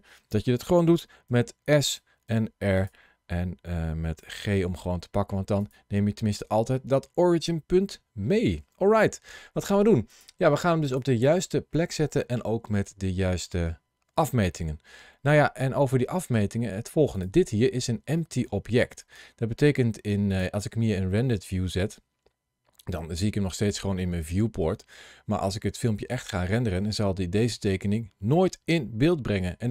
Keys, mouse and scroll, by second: 1.1 s, 1.7 click, 2.1 r, 2.6 click, 4.0 g, 5.5 click, 6.0 middle click, 17.0 click, 18.3 middle click, 21.7 click, 22.7 middle click.